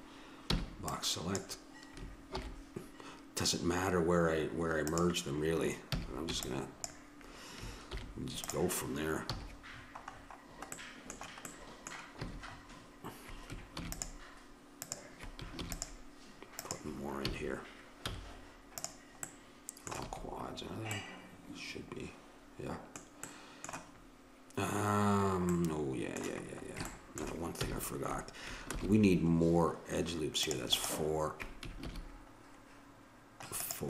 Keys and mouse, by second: 0.5 b, 2.4 alt+m, 5.9 a, 6.3 b, 8.0 alt+m, 9.3 a, 12.2 a, 13.7 ctrl+r, 15.7 ctrl+r, 17.2 a, 18.1 z, 20.1 a, 23.3-27.6 middle drag, 27.6 a, 28.7 ctrl+r, 31.9 ctrl+r.